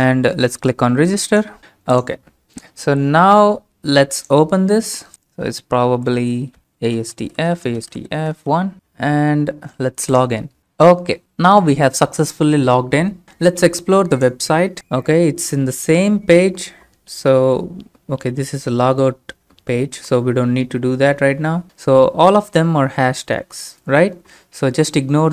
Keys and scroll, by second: 6.6 ctrl+a, 6.6-8.9 typing.